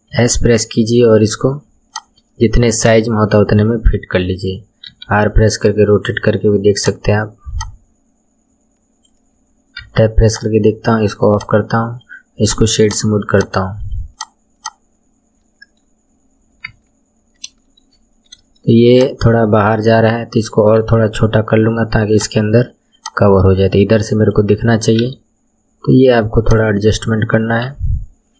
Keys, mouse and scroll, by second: 0.1 s, 2.7 click, 4.9 r, 7.5 click, 9.8 Tab, 10.3 click, 11.3 click, 12.0-12.8 right drag, 12.8 click, 13.3 click, 13.8-14.5 right drag, 14.5 click, 15.4-16.0 middle drag, 16.0-16.6 scroll down 1, 16.6 KP_1, 17.2-17.6 scroll up 4, 17.6-17.9 shift+middle drag, 17.9-18.4 scroll up 1, 18.4-18.9 shift+middle drag, 18.9 click, 19.2 Tab, 20.8 s, 22.9 click, 25.0 r, 27.7 s.